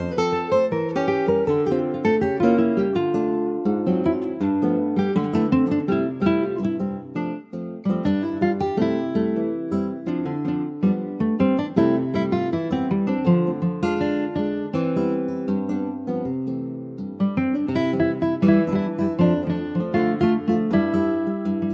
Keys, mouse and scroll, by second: 0.4 shift+click, 1.0 shift+click, 1.4 shift+click, 1.7 shift+click, 2.1-3.1 middle drag, 3.1 shift+click, 3.6 shift+click, 4.1 shift+click, 4.9-5.4 scroll down 2, 5.4-6.4 middle drag, 6.4 ctrl+s, 6.6 scroll down 2, 6.9 alt+middle click, 7.9 middle click, 8.4 scroll up 2, 8.7 middle click, 9.6 shift+click, 10.3 shift+click, 10.6 shift+click, 11.0 shift+click, 11.6 shift+click, 12.8 shift+click, 13.1-13.5 scroll down 1, 13.5 ctrl+s, 13.7-14.0 scroll down 1, 14.0 alt+middle click, 14.7 alt+z, 15.2-16.2 shift+middle drag, 16.2 s, 19.7 middle click, 20.1 alt+z, 20.4 middle click, 21.3 ctrl+s, 21.6 alt+middle click.